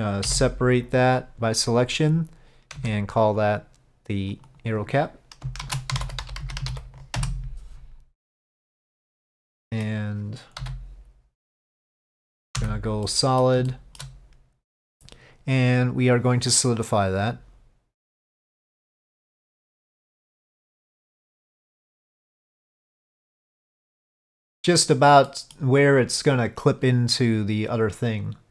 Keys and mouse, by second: 2.9 Tab, 3.5 click, 4.5-8.1 drag, 9.2-9.9 middle drag, 13.1-13.5 middle drag, 13.8-14.1 shift+middle drag, 14.8 middle click, 16.3 click, 17.1-18.3 drag, 20.0-24.6 drag, 25.4 middle click, 27.9-28.5 drag.